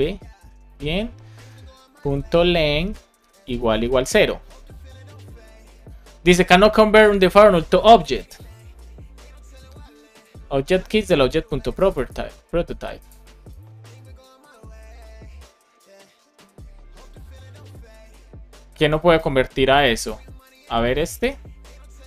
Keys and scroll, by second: 2.7 Return, 3.1 space, 3.6 space, 20.9 BackSpace.